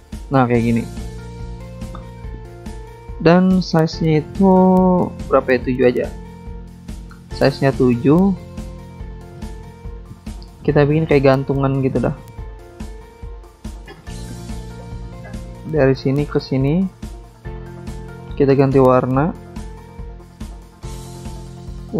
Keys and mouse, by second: 0.5 click, 1.6 click, 3.7 click, 4.7 click, 5.5 click, 5.7 click, 7.4 click, 7.4 click, 10.0 click, 10.1 click, 10.2 click, 10.3 double click, 11.1 double click, 11.2 double click, 15.5 click, 15.5 click, 16.2 click, 16.3 click, 16.9 alt+Tab, 17.6 alt+Tab, 18.4 click, 20.2 click, 20.3 click, 20.7 click, 20.8 double click.